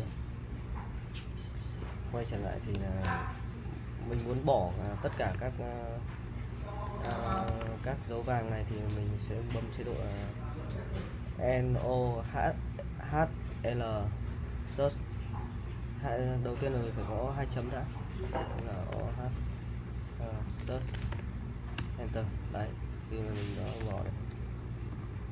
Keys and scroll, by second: 2.9-8.1 typing, 16.5-21.6 typing, 21.8 Return, 23.6-24.9 typing.